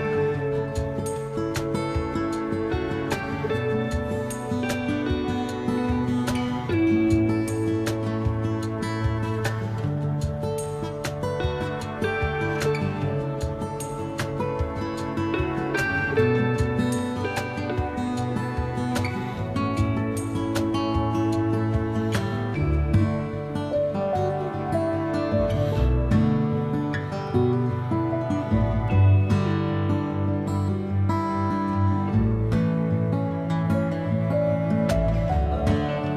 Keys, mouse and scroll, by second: 0.6 click, 2.4-6.2 drag, 12.4-14.0 drag, 14.7-16.3 ctrl+middle drag, 16.3-17.6 drag, 17.6-20.6 middle drag, 20.6-27.3 drag, 27.3-29.2 middle drag, 29.2 click, 29.3-31.0 middle drag, 31.0-36.1 drag.